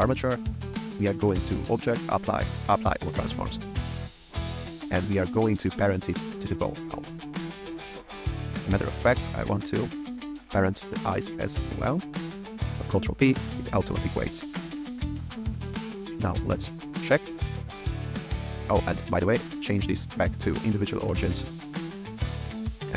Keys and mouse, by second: 1.3-2.8 drag, 5.3 shift+click, 6.6 ctrl+p, 7.6 click, 10.7 shift+click, 12.6 ctrl+p, 14.6 click, 15.2 click, 16.3-16.9 drag, 18.2 r, 19.3-21.5 drag, 22.2 r.